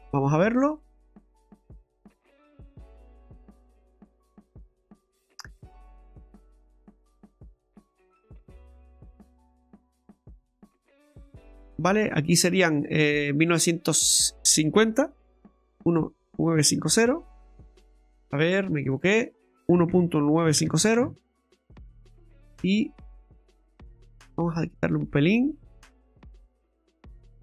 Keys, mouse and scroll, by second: 0.7-2.7 click, 1.2 click, 1.4 click, 2.0 click, 2.1 click, 2.4 click, 2.6 click, 4.9 click, 5.6-5.9 scroll up 4, 6.1 shift+middle click, 6.5-7.7 scroll up 4, 7.7 middle click, 11.0 click, 12.6 click, 13.4 click, 18.9 click, 22.5 middle click, 25.6 click, 27.0 click.